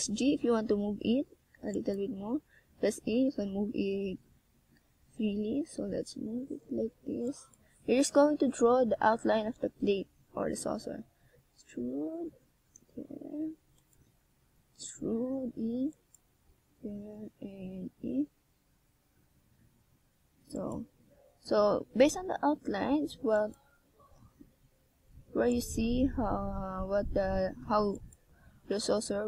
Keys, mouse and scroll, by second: 0.3 right click, 0.9 right click, 2.5 g, 4.6 click, 5.8 right click, 6.9 a, 11.1 KP_7, 12.0-12.9 shift+scroll down 3, 12.9 shift+scroll down 2, 12.9 a, 15.6 scroll down 3, 17.0 click, 18.2-18.6 shift+scroll down 4, 19.9 click, 21.0 click, 24.1 click, 27.9 scroll down 1.